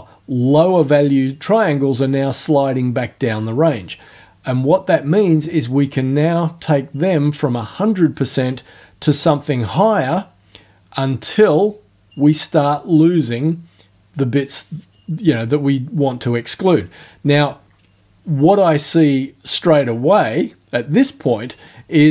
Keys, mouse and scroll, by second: 9.5-17.6 drag.